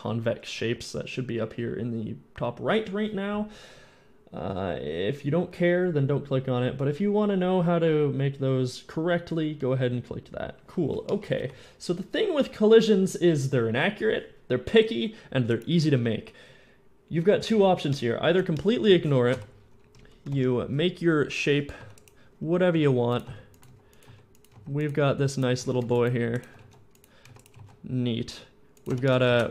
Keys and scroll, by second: 11.6 End, 19.5 shift+End, 20.1 Tab, 20.2 Tab, 20.6 Tab, 21.6-25.4 typing, 25.6 ctrl+r, 26.4 ctrl+b, 27.1 ctrl+b, 27.1 e, 27.4 alt+s, 27.5 alt+s, 28.7 Tab, 29.4 shift+z.